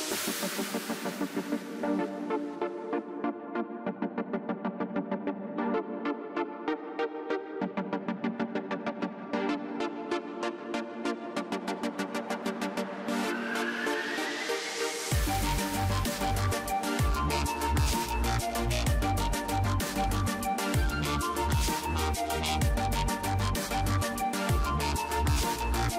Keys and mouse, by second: 1.2 z, 2.2 ctrl+s, 3.6-5.8 drag, 5.8 middle click, 6.2 ctrl+s, 8.9 middle click, 10.9 middle click, 12.1 KP_3, 12.8 ctrl+s, 17.3-19.9 drag, 17.7 v, 18.5 b, 19.1 z, 19.9 z, 21.0 ,, 21.4 ., 22.2-24.0 drag, 24.2 KP_1, 25.7 ctrl+z.